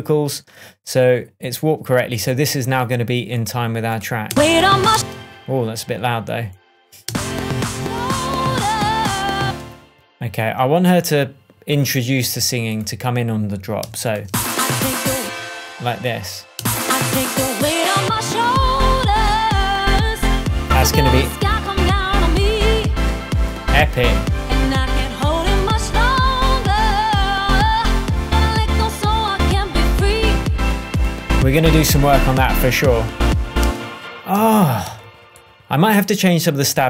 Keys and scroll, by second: 4.2 space, 7.0 space, 9.4 space, 13.7 a, 14.2 space, 16.5 space, 33.6 space, 34.3 super+space, 34.8 super+s.